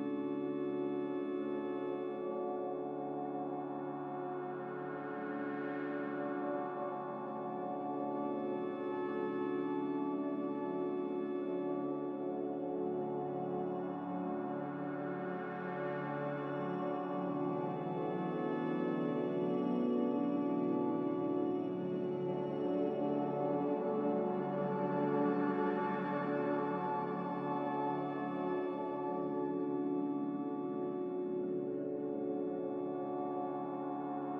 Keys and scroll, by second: 0.8-3.4 typing, 5.5 ctrl+z, 8.6-9.6 typing.